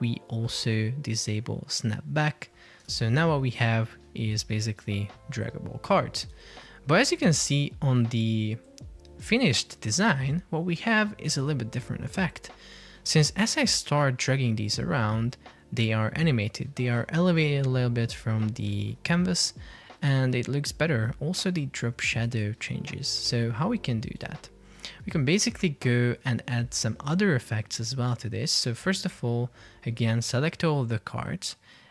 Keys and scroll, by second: 3.0 super+p, 6.5 super+r, 7.4 super+Tab, 23.5 super+Tab, 24.3 super+Tab, 25.7 Escape.